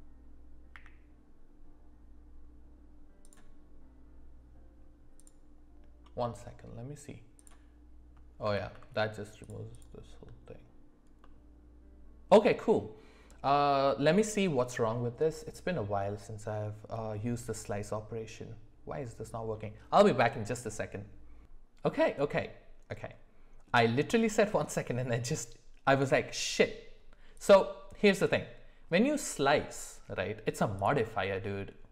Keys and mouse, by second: 0.7 q, 5.3-7.5 drag, 8.5 ctrl+z, 9.4 click, 9.7 click, 11.2-12.3 middle drag, 16.9-19.3 middle drag, 23.0 middle click, 27.3 click.